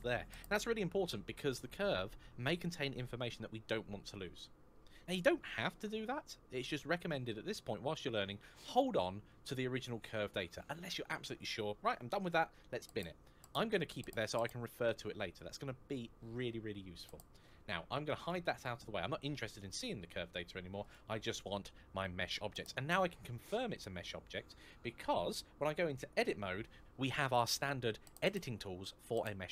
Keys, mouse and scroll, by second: 18.1 click, 20.6 click, 25.9 Tab.